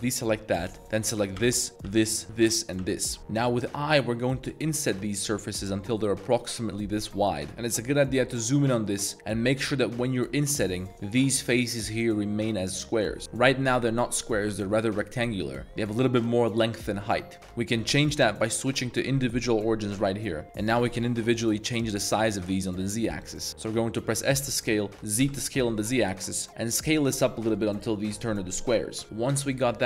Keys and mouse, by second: 1.3-3.7 typing, 7.5 i, 9.4 i, 13.6 middle click, 18.3-20.1 drag, 20.8 s, 20.9 z, 24.1 s, 25.2 z, 29.0 ctrl+z.